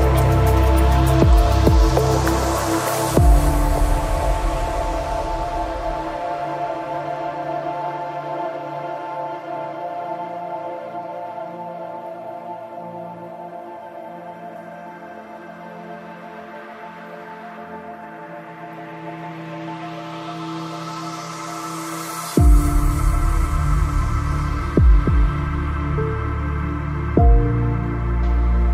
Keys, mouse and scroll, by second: 1.2 ctrl+r, 2.6 ctrl+r, 5.5 ctrl+r, 7.7 ctrl+Tab, 10.2-14.5 drag, 11.1 g, 12.1 g, 13.4 g, 15.0 g, 16.7 g, 19.5 g, 20.0-24.9 right drag, 20.7 g, 21.8 g, 23.3 g, 25.5-27.3 right drag, 25.6 g, 27.8-28.7 right drag, 27.9 g.